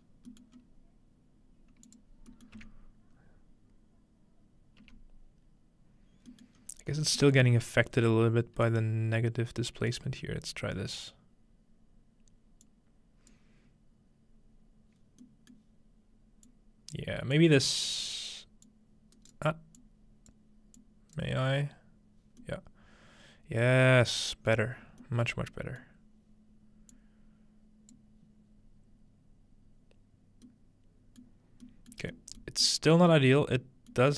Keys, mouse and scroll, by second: 0.0 scroll down 2, 0.5 scroll up 2, 1.9-4.0 drag, 2.6 m, 4.8 m, 6.5 middle click, 6.6-8.7 scroll up 3, 8.7-11.7 drag, 12.6-15.0 drag, 15.2 scroll down 1, 15.3-15.6 scroll down 1, 15.6 middle click, 16.5 click, 17.4 click, 17.9 right click, 18.7-20.3 drag, 19.2 right click, 20.8-21.8 drag, 24.8 middle click, 26.0-28.0 middle drag, 26.9-29.1 drag, 31.2 middle click, 31.5-33.3 scroll down 2, 31.9 middle click, 32.5 middle click, 32.9 middle click, 33.3 middle click, 33.9 middle click.